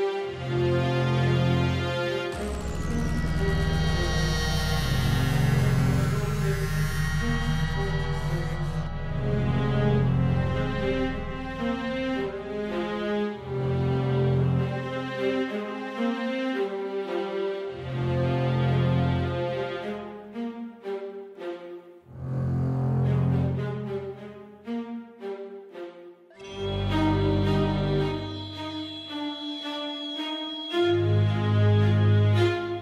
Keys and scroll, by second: 0.6 Left, 0.9 Right, 7.4 Page_Up, 8.3 Page_Down, 29.5 Down.